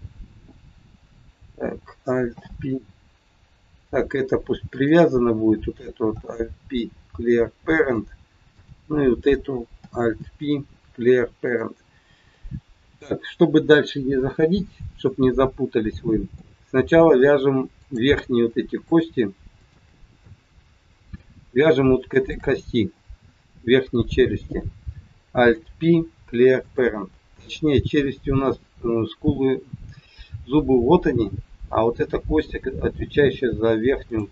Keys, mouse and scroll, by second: 2.3 alt+p, 4.7 click, 6.2 alt+p, 8.6 click, 9.8 alt+p, 12.3 middle click, 14.3-14.7 scroll up 1, 15.0 middle click, 17.0-17.4 scroll down 1, 17.7 click, 18.8 shift+click, 19.5 click, 20.3 middle click, 22.1 shift+click, 25.4 ctrl+p, 27.3-27.6 scroll down 4, 31.7 scroll up 3, 32.3 scroll up 1, 32.8 scroll up 2, 33.2-33.5 scroll down 4, 34.0 click.